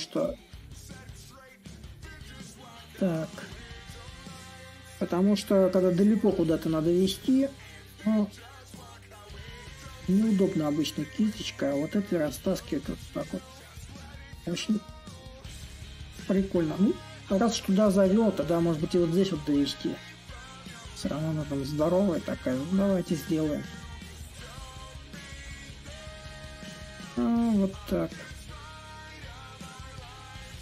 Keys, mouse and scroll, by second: 6.5-11.5 drag, 12.6-17.6 drag, 20.3-25.3 drag, 25.6-30.6 drag.